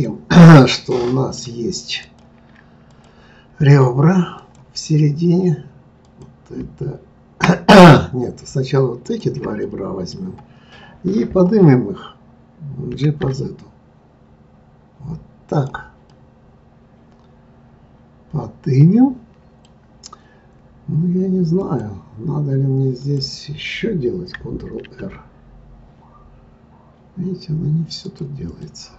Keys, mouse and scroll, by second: 0.0 click, 0.9-2.0 middle drag, 2.0 click, 2.9 click, 2.9-4.3 right drag, 4.3 click, 6.0 click, 7.7 click, 9.0 shift+click, 9.6-12.6 middle drag, 12.9 g, 16.1-19.1 middle drag, 21.6 click, 23.0 click, 24.8 ctrl+r, 28.6-28.9 middle drag.